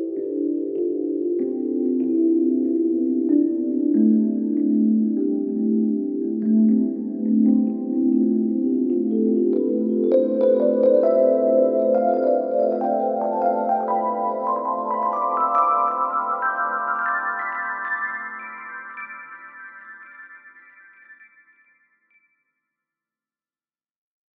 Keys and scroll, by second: 0.4 ], 6.0 ], 11.1 [, 11.4 ], 18.3 Delete, 19.4 4.